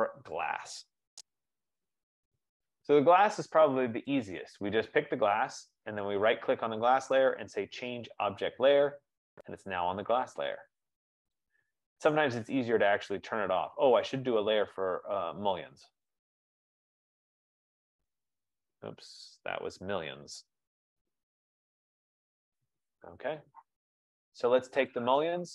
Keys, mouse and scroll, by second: 1.0-3.8 typing, 4.3 click, 6.3 right click, 6.8-7.6 typing, 8.9 click, 11.8 click, 14.6 click, 15.0 click, 16.2 click, 17.2-22.7 typing, 25.1 click.